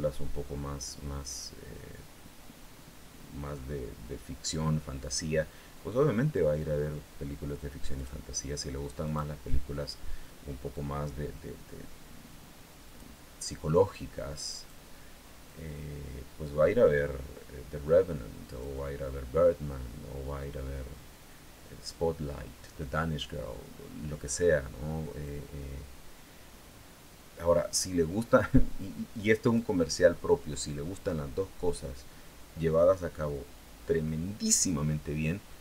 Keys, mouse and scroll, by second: 7.7 click, 8.8 click, 10.5-12.9 drag, 13.7 click, 15.2-18.6 drag, 25.0-29.5 drag.